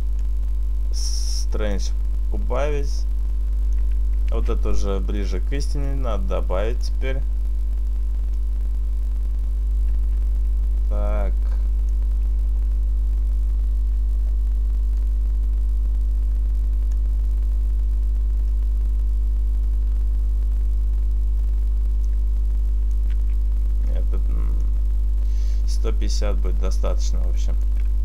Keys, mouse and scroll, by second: 0.3 click, 2.7 click, 4.2 ctrl+z, 5.9 click, 8.5 click, 13.9 ctrl+z, 14.3 click, 18.6 click, 23.3 ctrl+z, 24.0 click.